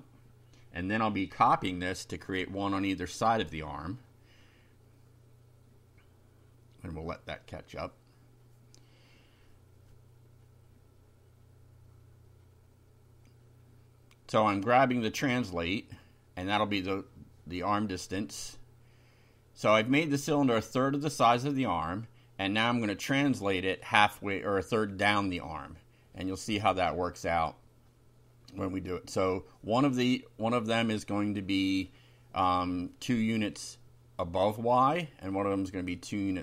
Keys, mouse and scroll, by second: 2.3 3, 2.7 Right, 3.9 Left, 4.2 Delete, 5.5 2, 5.9 0, 8.7 Up, 9.4 Down, 10.1 Home, 13.3-14.4 drag, 15.0-16.0 drag, 16.5 ctrl+c, 17.0 ctrl+click, 17.3 ctrl+v, 18.7 Delete, 19.3 Left, 23.3 click, 24.4 /, 25.1 3, 27.3 click, 28.5 ctrl+c, 29.1 click, 30.1 ctrl+v, 31.3-32.2 typing, 34.5 F5.